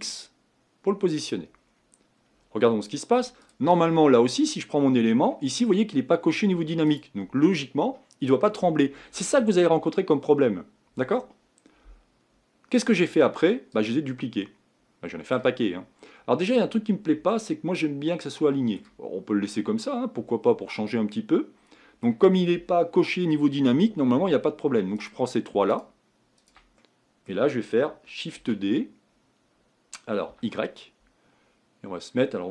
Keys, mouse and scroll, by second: 1.6-3.5 scroll down 6, 3.5-10.2 drag, 12.8-14.4 drag, 14.4-15.9 middle drag, 15.9-17.3 scroll up 6, 17.3-19.9 middle drag, 19.9-20.3 scroll down 2, 20.3-25.1 middle drag, 25.1 click, 26.5 shift+click, 26.8-28.4 middle drag, 28.4 shift+d.